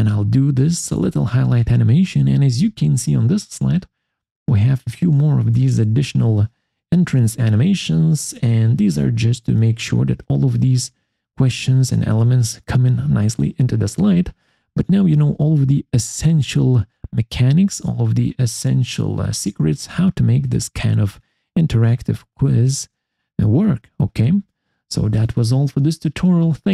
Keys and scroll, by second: 15.0 Escape.